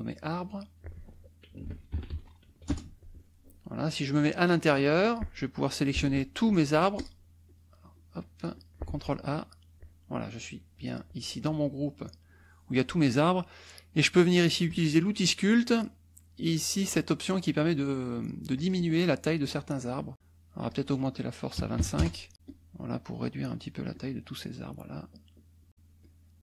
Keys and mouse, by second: 0.3 click, 1.2-2.9 typing, 4.4 click, 6.0 ctrl+a, 7.0 ctrl+click, 7.4 ctrl+click, 7.9 click, 8.5 click, 8.8 ctrl+a, 14.6 click, 18.5 click, 19.4 click, 19.8 click, 20.6 click, 21.8 KP_5, 22.0 KP_Enter, 22.3-23.8 drag, 23.9-25.8 drag, 26.0 click.